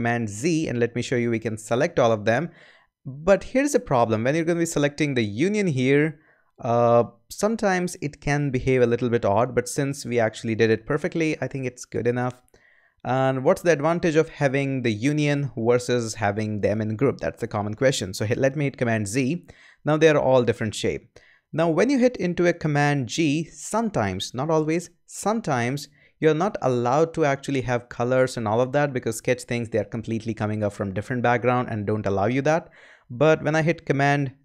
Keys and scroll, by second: 0.4 super+z, 19.1 super+z, 25.1 super+g.